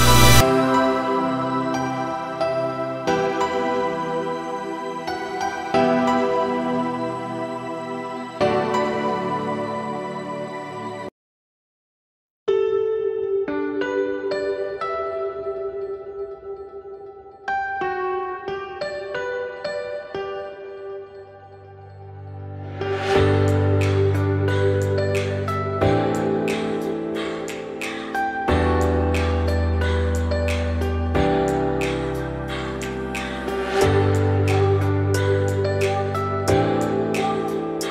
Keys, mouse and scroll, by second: 0.2 2, 0.5 click, 0.9 middle click, 1.3 f, 1.5 f, 2.0 middle click, 2.5 `, 3.4-3.8 scroll down 2, 3.8 1, 4.2-4.8 scroll up 2, 4.8 z, 5.4 click, 5.7 z, 7.0 z, 8.0-8.3 scroll down 2, 8.3 g, 14.5 scroll up 2, 14.7 z, 15.2 click, 15.5 z, 16.0 scroll down 2, 16.2 g, 22.0-22.5 scroll up 1, 22.5 Tab, 22.8 click, 23.0 Tab, 23.3-23.6 scroll up 2, 23.6 ctrl+r, 27.7 shift+middle click, 27.9-28.6 shift+scroll up 8, 28.6 z, 29.1-30.1 shift+middle drag, 30.1-31.3 drag, 31.3 scroll down 2, 31.5 1, 31.9-32.2 scroll up 2, 32.2-32.6 scroll down 2, 32.6 g, 34.0-34.9 scroll down 4, 34.9 click, 36.2 shift+middle click, 36.9-37.9 scroll up 1.